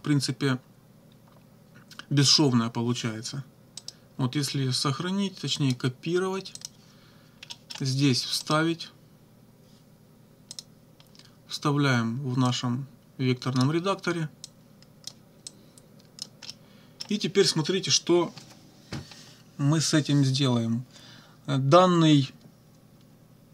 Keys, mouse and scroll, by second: 3.8 right click, 5.6 click, 6.6 click, 7.5 middle click, 8.4 right click, 10.6 click, 12.5-13.8 drag, 14.5 click, 15.5 click, 16.5 click.